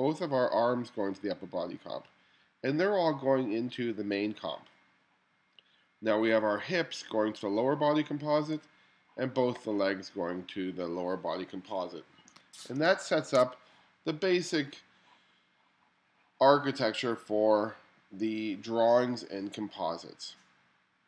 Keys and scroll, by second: 12.9 space.